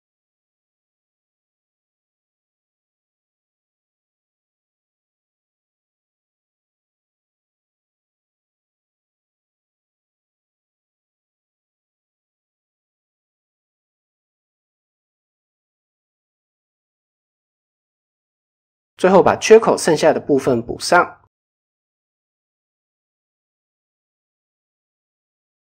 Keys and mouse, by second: 0.2 g, 1.1 click, 1.3 g, 4.1 click, 4.3 g, 5.1 click, 5.3 g, 6.7 ctrl+z, 7.4 g, 8.4 click, 8.7 g, 9.6 click, 9.7 g, 10.8 Tab, 11.2 middle drag, 11.8 middle click, 12.3 middle click, 12.8 middle click, 13.2 middle drag, 13.7-14.0 middle drag, 14.6 KP_1, 15.0 KP_3, 16.1 KP_1, 16.9-17.2 shift+middle drag, 18.2 drag, 19.2 shift+a, 21.8 KP_7, 23.0 click, 23.7 click.